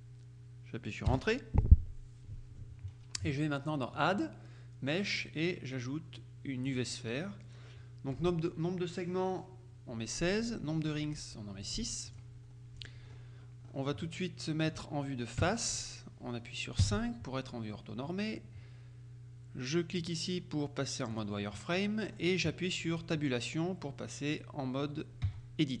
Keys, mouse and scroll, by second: 1.2 Return, 4.0 click, 6.8 click, 10.3 click, 11.7-12.7 drag, 12.8 click, 13.2-14.1 scroll up 1, 14.1 middle click, 15.5 KP_1, 16.9 KP_5, 20.1 click, 21.2 click, 22.2-22.7 scroll up 1, 25.3 Tab.